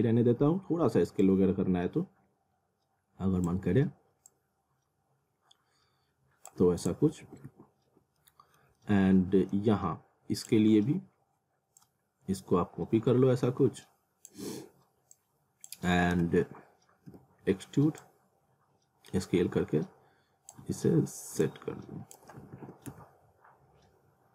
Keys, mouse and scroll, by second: 0.4 r, 1.2 click, 3.5 w, 4.3 click, 7.2 alt+w, 8.2 middle click, 8.8 alt+middle click, 10.4 click, 10.7 scroll down 1, 11.8 shift+click, 16.1-17.6 typing, 18.0 click, 20.6 w, 21.4 click, 22.4 alt+w, 22.9 z.